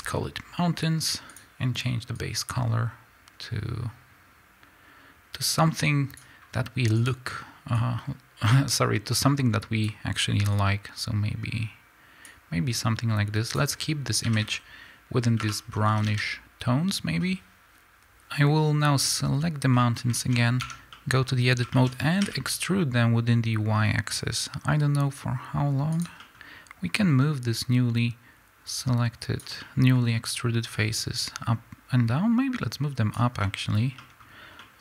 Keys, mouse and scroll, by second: 14.4 a, 18.9 click, 19.7-25.9 middle drag, 20.2-20.5 scroll up 2, 20.5 Tab, 22.1 e, 25.9 click, 26.1 middle click, 26.8-29.5 drag, 29.5-30.6 middle drag, 30.6-33.3 drag, 33.3-34.8 middle drag.